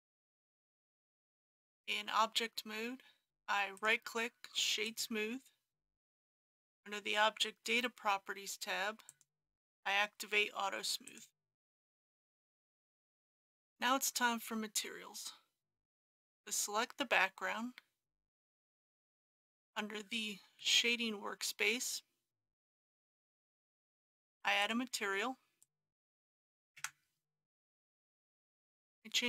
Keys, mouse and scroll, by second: 1.3 Tab, 3.8 right click, 4.9 click, 20.6-23.1 middle drag, 23.4 shift+middle click, 24.6 click, 26.2 b, 26.4 g.